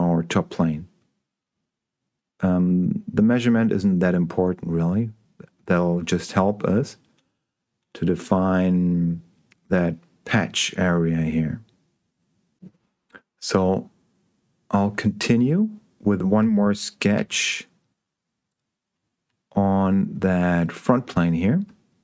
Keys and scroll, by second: 17.4 s.